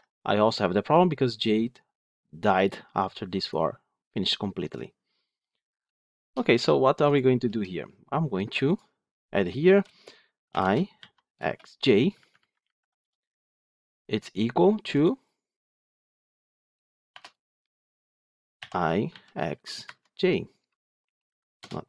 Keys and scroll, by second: 19.7 Escape.